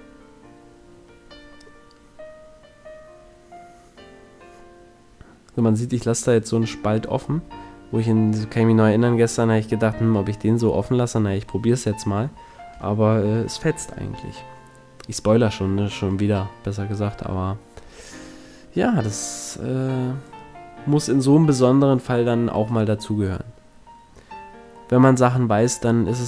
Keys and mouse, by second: 3.4 ctrl+r, 5.4 click, 9.8-12.0 drag, 10.2 ctrl+l, 12.4 c, 15.2 KP_Decimal, 18.8-20.8 middle drag, 22.6 a, 23.1 middle click, 24.2 click, 24.4-25.8 middle drag, 25.8 z.